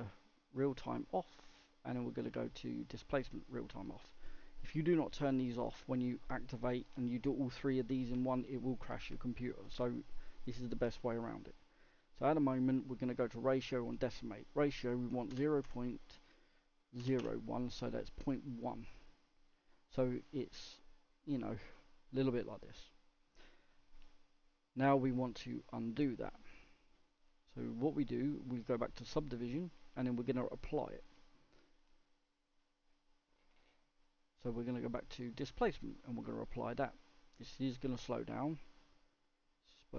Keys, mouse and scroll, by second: 0.6 click, 3.3-18.2 drag, 20.2 click, 20.4-25.5 middle drag, 25.5-26.6 drag, 26.6-32.9 middle drag, 32.9 click, 37.2 click, 38.1-38.8 middle drag, 38.8 scroll up 2, 39.0-39.3 scroll down 1, 39.3-39.6 scroll up 1, 39.8-39.9 middle drag.